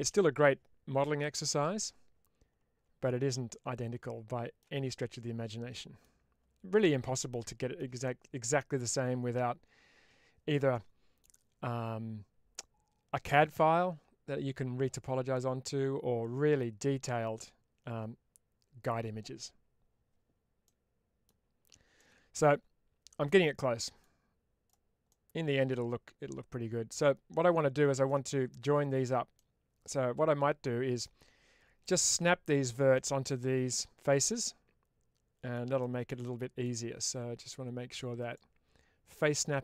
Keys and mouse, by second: 3.4-4.5 middle drag, 4.8-5.9 middle drag, 7.1 shift+middle click, 7.9-11.1 middle drag, 20.5 middle click, 21.8-23.1 middle drag, 23.4 middle click, 24.5 click, 25.0-27.9 middle drag, 29.2-30.9 middle drag, 32.8 middle click, 34.2-35.4 middle drag, 35.7 shift+middle click, 36.1 middle click, 38.0-39.6 drag.